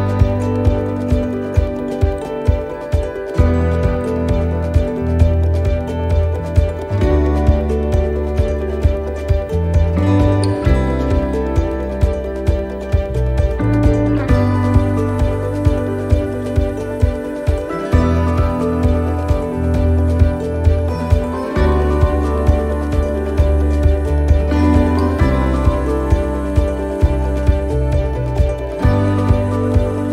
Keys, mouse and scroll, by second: 0.0 right click, 1.3 l, 1.6 middle click, 2.5 l, 3.7 shift+d, 5.1 r, 7.4 middle click, 11.4 click, 13.5 right click, 14.7 l, 15.5 click, 18.2 click, 18.2 middle click, 20.7 middle click, 21.8 right click, 22.7 l, 23.0 middle click, 24.1 click, 27.5 middle click, 29.9-30.1 scroll down 3.